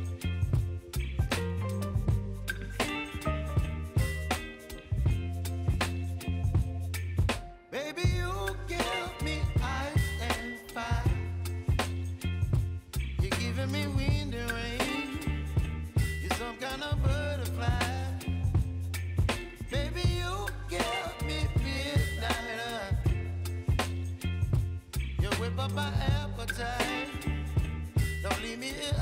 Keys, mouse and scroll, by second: 2.0 click, 6.7 click, 10.1 space, 12.7 space, 19.6 space, 20.9 k, 22.1 click, 23.9 click, 24.4 space, 27.1 space, 27.7-28.9 drag.